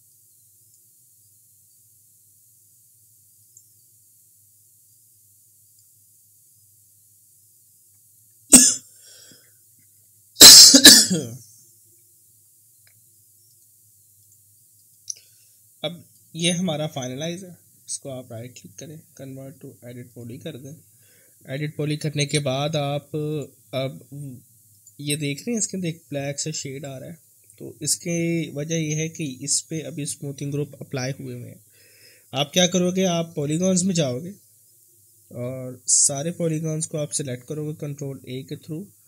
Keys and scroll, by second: 36.8 ctrl+a.